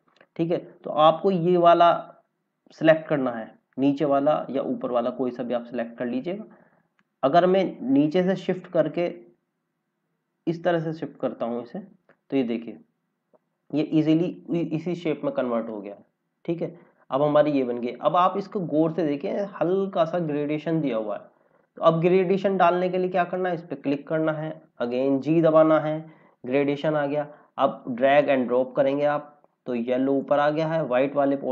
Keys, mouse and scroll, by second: 0.1 scroll up 1, 6.9 click, 11.7 scroll down 1, 14.5 scroll down 1, 15.7 click, 17.8 scroll up 1, 20.7 scroll down 1, 23.2 click, 27.5 scroll up 1, 28.2 click.